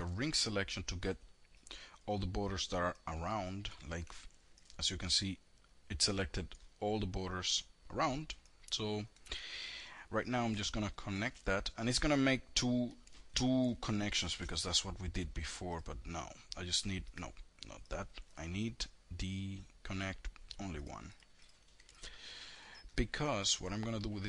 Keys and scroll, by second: 3.0 F3, 8.3 F3, 8.7 F3, 9.5 ctrl+shift+e, 13.3 ctrl+z.